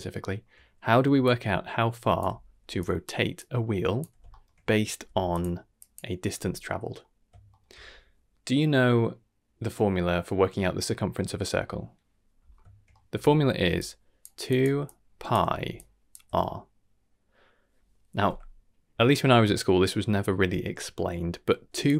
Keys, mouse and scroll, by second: 0.2 shift+middle click, 1.0 d, 1.2-2.1 drag, 2.2-7.5 typing, 2.8 click, 3.3-4.0 drag, 4.2 shift+middle click, 5.3 click, 5.7 click, 7.5 shift+middle click, 12.9 middle click, 13.6-16.1 typing, 13.7-14.2 drag, 14.4 click, 14.8-15.3 drag, 15.7-16.1 drag, 21.8-21.9 drag.